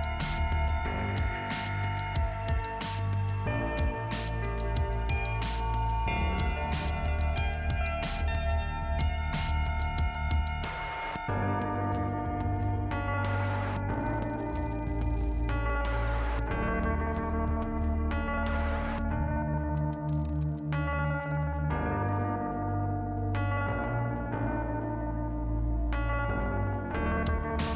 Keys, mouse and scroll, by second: 0.9 middle click, 1.8 scroll up 1, 2.9 click, 2.9 click, 3.8 click, 6.6 click, 6.7 click, 7.2 scroll down 2, 13.0 middle click, 15.8 click, 15.9 click, 16.9 click, 17.0 click, 22.4 scroll up 1, 22.5 middle click, 23.4-24.4 scroll up 2, 25.6 click.